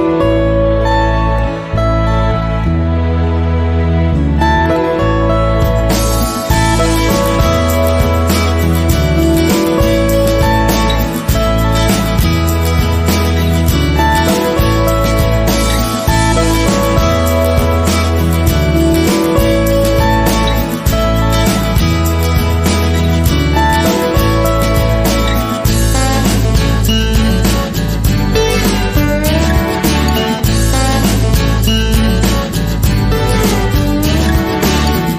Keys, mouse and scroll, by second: 3.5 g, 8.2 right click, 8.2 scroll down 1, 8.4 click, 8.6 ctrl+r, 9.3 right click, 9.5 s, 10.7 click, 10.9 ctrl+r, 11.7 click, 11.9 ctrl+r, 12.2 right click, 12.4 s, 13.1 right click, 13.6 ctrl+z, 14.3 click, 14.5 s, 15.1 click, 16.0 click, 16.1 s, 16.5 click, 16.7 shift+middle click, 16.9 click, 17.3 middle click, 20.9 scroll down 1, 21.2 scroll up 1, 21.5 ctrl+r, 21.9 right click, 22.1 s, 22.4 click, 22.8 click, 23.0 s, 23.7 click, 24.3 s, 24.7 click, 26.4 scroll down 1, 26.5 middle click, 27.3 Tab, 27.4 click, 27.5-30.4 middle drag, 28.4 scroll up 1, 30.1 scroll down 1, 30.4 click, 30.5 KP_1, 30.7 scroll up 1, 30.9 Tab, 30.9 middle click.